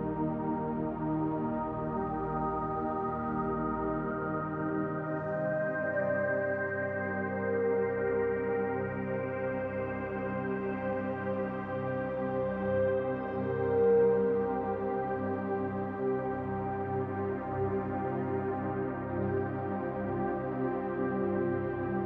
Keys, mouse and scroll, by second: 1.3 click, 5.4 click, 8.3 middle click, 12.1 shift+click, 19.9 middle click, 21.0-21.5 scroll down 1, 21.5 middle click, 21.5-22.0 scroll down 1.